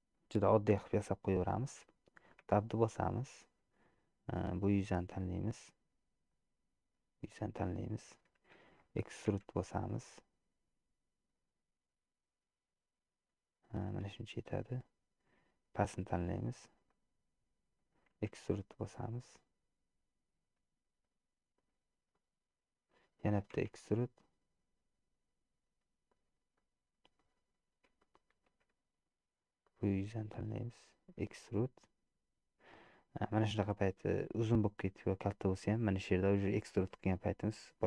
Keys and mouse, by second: 1.0 middle click, 1.6 middle click, 2.7 Tab, 6.4-8.1 middle drag, 9.6 e, 14.6 middle click, 17.0 middle click, 17.2 click, 18.4 e, 22.3 middle click, 23.8 e, 26.8 click, 26.9 middle click, 28.1 shift+click, 28.9 middle click, 29.7 click, 31.4 e.